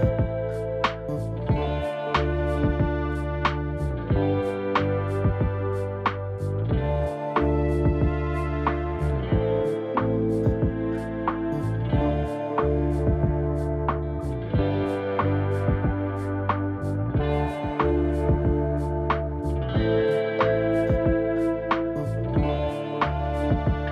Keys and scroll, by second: 1.9 ctrl+d, 3.8 ctrl+s, 21.2 0.